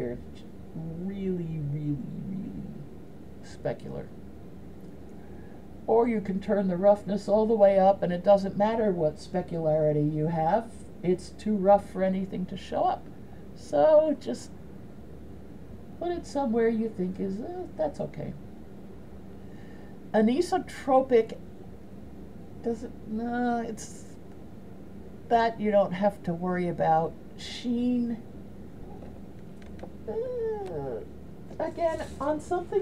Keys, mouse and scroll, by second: 5.6-7.4 drag, 13.5-17.6 drag, 21.8-24.4 drag, 27.7-31.9 drag.